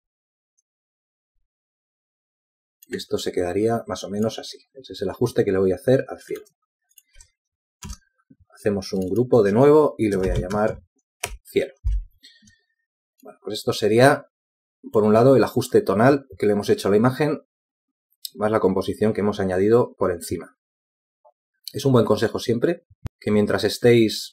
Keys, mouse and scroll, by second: 10.1 shift+click, 11.0 ctrl+g, 13.3-13.9 typing, 14.4 Return, 15.6 z.